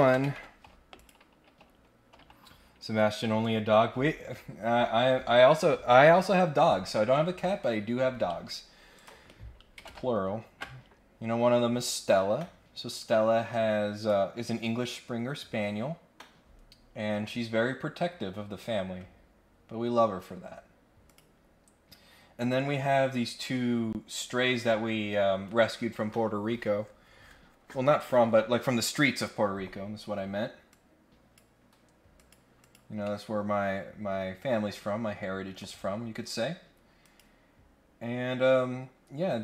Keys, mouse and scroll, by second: 0.9 click, 8.9 click, 9.8 ctrl+Tab, 12.9 click, 13.9 click, 19.9 scroll down 1, 20.2 scroll up 1, 21.1 click, 30.7 click, 32.1 click, 32.5 click, 33.0-34.7 middle drag, 35.6 click, 37.0 click.